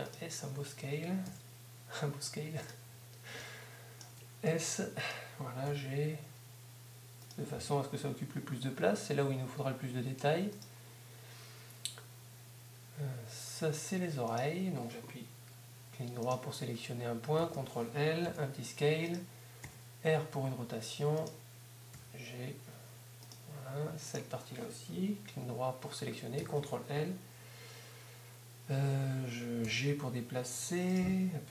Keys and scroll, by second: 0.7 s, 2.7 s, 4.7 shift+s, 5.7 shift+g, 6.7 g, 8.7 s, 17.4 Up, 22.0 g, 22.7 g, 29.7 g, 30.7 g.